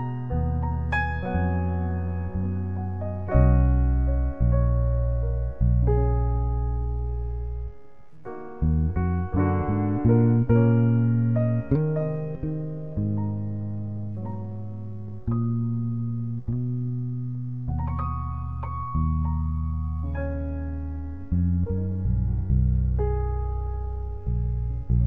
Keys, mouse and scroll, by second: 1.0-1.5 drag, 4.6 click, 6.7 g, 7.2 shift+a, 8.2 shift+a, 9.1 click, 11.2 click, 16.8 ctrl+alt+b, 19.0 ctrl+l, 19.7 a, 23.3 ctrl+l.